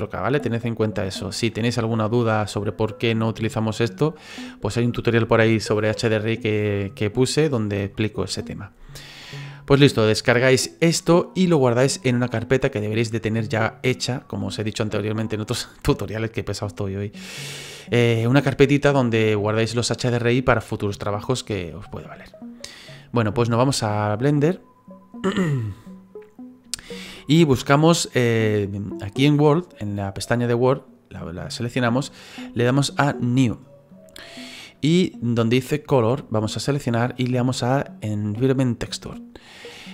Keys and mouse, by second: 30.6 click, 33.9 click, 36.6 click, 38.8 click.